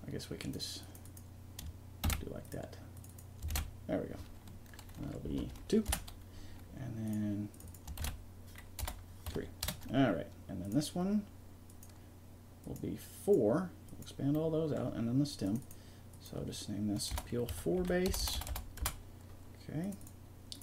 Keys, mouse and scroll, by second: 0.5-3.1 drag, 4.9 click, 7.0 click, 10.6-15.2 drag, 15.2-16.4 middle drag, 16.4-17.5 drag, 18.2 BackSpace, 18.3 BackSpace, 19.8-20.6 drag.